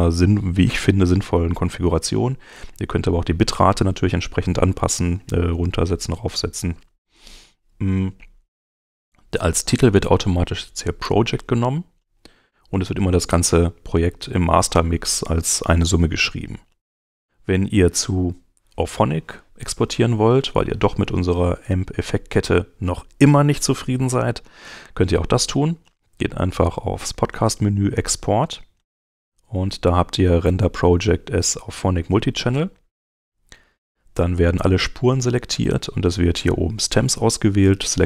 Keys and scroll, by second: 18.7 Escape.